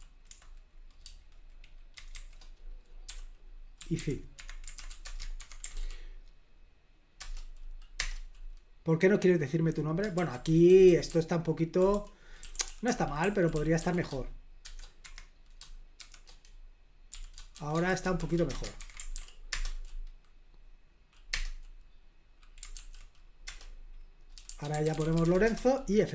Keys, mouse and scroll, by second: 2.1-5.3 typing, 5.4 super+h, 5.7 ctrl+p, 7.2 Return, 8.0 Return, 10.1 super+l, 10.2-14.6 typing, 15.0 Escape, 15.7-18.7 typing, 17.7 Escape, 18.8 super+h, 19.1 ctrl+p, 19.5 Return, 21.3 Return, 22.7 ctrl+p, 23.5 Return, 24.4-25.7 typing.